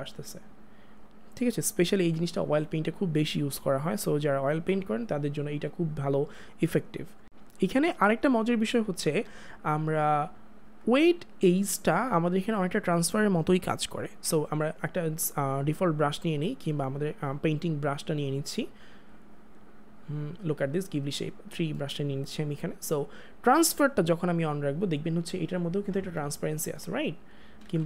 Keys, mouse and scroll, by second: 1.1 click, 4.2 click, 10.8 click, 15.8 click, 23.7 click, 27.3 click, 27.6 ctrl+z.